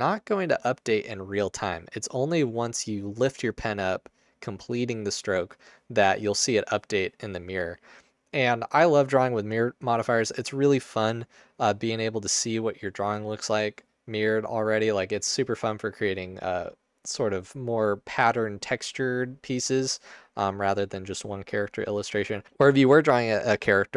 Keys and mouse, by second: 2.5 click, 4.6 click.